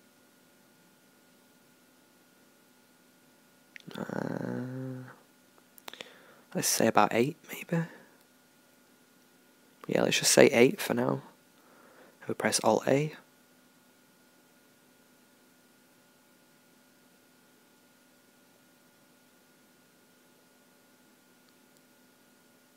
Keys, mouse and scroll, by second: 9.5-11.6 drag.